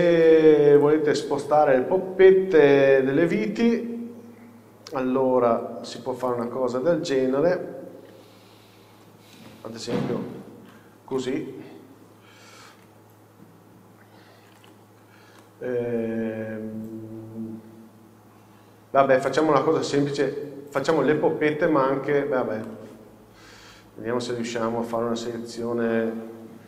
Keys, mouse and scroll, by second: 0.0 click, 1.1 click, 2.3 scroll down 1, 5.6 alt+h, 6.6 click, 10.5 shift+h, 11.3 KP_7, 13.0 z, 13.8 scroll up 1, 14.7 alt+a, 15.5 shift+middle drag, 16.2 scroll down 1, 16.7 scroll up 1, 20.7-22.1 scroll down 1, 22.1 scroll up 1, 23.0-23.6 middle drag, 23.3 scroll up 1.